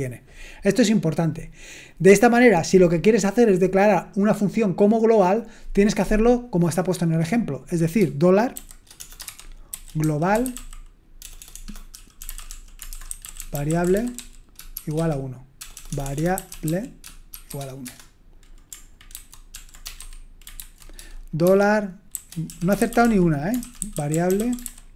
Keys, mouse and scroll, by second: 8.5-17.5 typing, 17.9 Return, 19.1 ctrl+c, 19.5 ctrl+p, 19.8-20.5 typing, 20.6 ctrl+c, 22.3-24.9 typing.